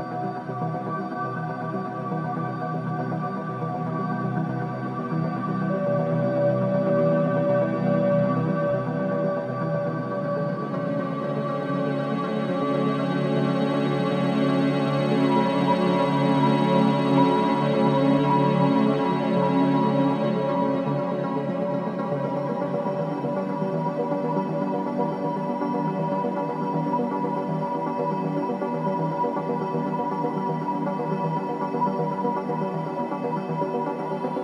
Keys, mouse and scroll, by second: 0.4 click, 1.3 ctrl+Delete, 2.2 click, 3.0 ctrl+Delete, 4.3 click, 5.1 ctrl+Delete, 6.1 click, 7.2 ctrl+Delete, 8.8 click, 9.7 ctrl+Delete, 13.1 click, 14.1 shift+click, 14.6-15.9 alt+drag, 16.2 alt+click, 18.5 alt+click, 20.6-22.1 alt+drag, 23.9-25.6 alt+drag, 25.6 ctrl+Delete, 26.7 alt+click, 27.2 right click, 27.9 click, 29.0 3, 30.6 scroll down 1, 31.0 alt+click, 32.5-33.9 alt+drag, 33.9 scroll down 1, 34.3 alt+middle click.